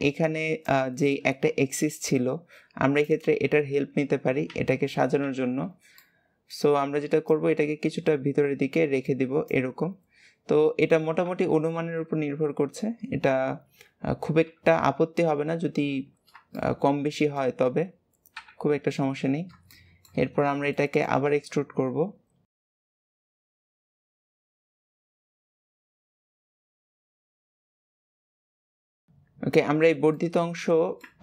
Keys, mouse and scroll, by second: 3.8-4.4 scroll up 3, 4.4 alt+z, 5.9-7.2 shift+middle drag, 7.2 click, 10.0-11.7 scroll down 1, 13.0-14.4 scroll down 1, 14.4 KP_7, 15.4 alt+z, 16.0-16.5 scroll up 1, 16.5-18.2 shift+middle drag, 18.2 KP_3, 19.2-19.7 scroll down 1, 19.7-22.8 shift+middle drag, 22.8 e, 23.9 shift+middle click, 24.0 scroll up 2, 24.2 click, 24.3 g, 25.1 shift+middle click, 25.5 click, 25.6 g, 26.3 click, 26.3 g, 27.4 click, 27.6 shift+middle click, 27.8 click, 28.0 shift+middle click, 28.3 click, 28.4 g, 28.9-29.8 scroll down 4, 30.1-31.2 middle drag.